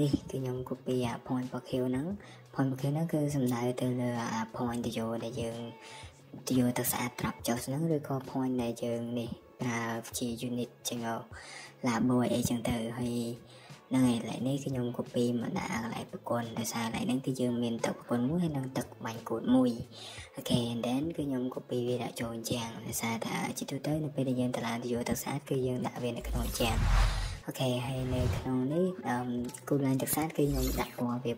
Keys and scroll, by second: 1.0 typing, 5.2-6.2 typing, 8.0 Escape, 9.0-9.5 typing, 10.7 typing, 16.5 Escape, 19.2 typing, 23.3 Escape, 23.8 Escape, 27.6 Escape.